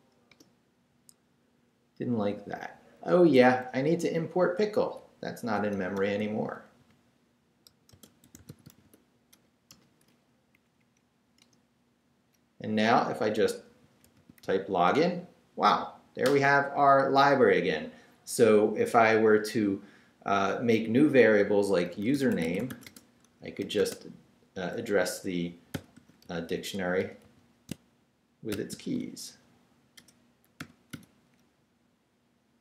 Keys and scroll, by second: 0.3 shift+Return, 0.9 Return, 5.3-9.3 typing, 9.7 Return, 10.5 Up, 11.4 Return, 13.2-14.9 typing, 21.6-23.8 typing, 25.5-28.5 typing, 30.0 BackSpace, 30.6 [.